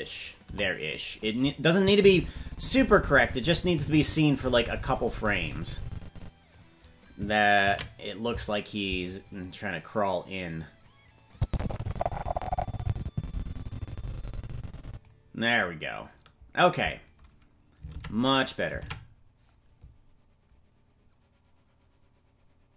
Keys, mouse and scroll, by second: 0.4 KP_0, 1.8-6.6 drag, 10.0 ctrl+s, 11.3-15.2 drag, 18.0 ctrl+Tab, 18.4 right click, 18.8 ctrl+Tab.